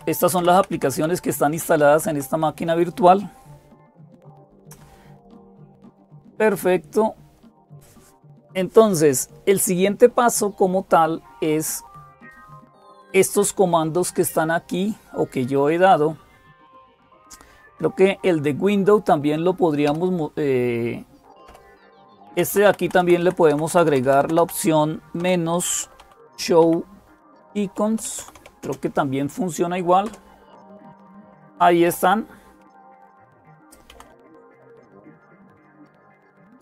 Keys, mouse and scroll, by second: 0.0-36.6 typing, 21.3 Up, 22.1 Up, 22.1 Left, 22.3 Left, 22.5 Left, 22.6 Left, 22.8 Left, 23.0 Left, 23.3 Left, 23.5 Left, 23.7 Left, 23.9 Left, 24.0 Left, 24.2 Left, 31.9 Down.